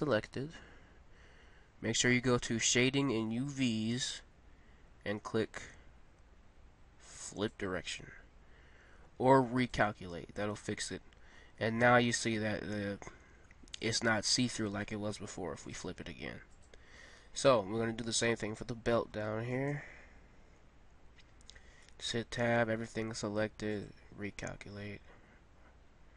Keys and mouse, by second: 7.4 right click, 11.5-15.6 middle drag, 15.6-16.9 drag, 16.9-18.9 middle drag, 18.9 Tab, 21.5 Tab.